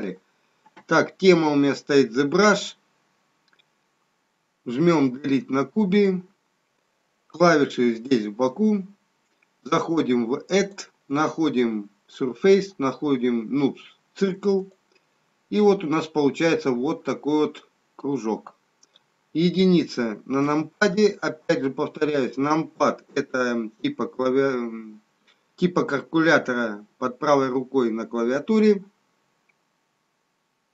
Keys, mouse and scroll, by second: 5.0 Delete, 10.6 click, 16.1 scroll up 2, 17.1 middle click, 17.1 scroll up 4, 20.3 KP_1.